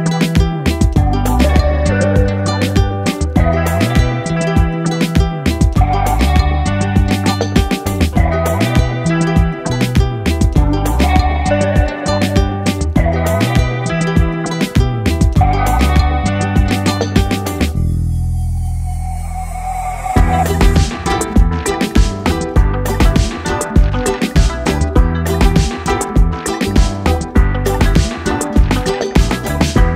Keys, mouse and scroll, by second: 0.2 click, 0.7 Down, 2.0 click, 3.3-3.7 typing, 4.6 Return, 7.2 click, 7.2 Right, 10.1 click, 10.8 shift+Right, 11.4 Left, 15.5 click, 18.3 ctrl+j, 19.1 click, 28.5 Right.